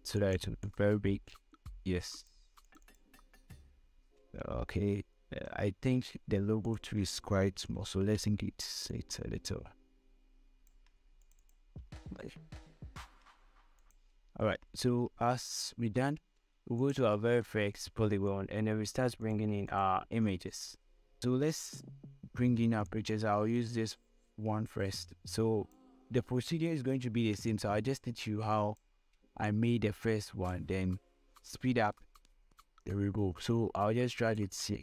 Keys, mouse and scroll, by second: 6.2-6.8 scroll up 2, 7.3 ctrl+click, 8.2 ctrl+t, 9.7-12.4 alt+drag, 12.8-14.0 alt+scroll down 4, 14.4 ctrl+click, 14.9 alt+scroll down 1, 15.6 scroll down 1, 16.2 scroll up 1, 16.8 scroll up 1, 17.5 ctrl+click, 24.5-34.4 drag.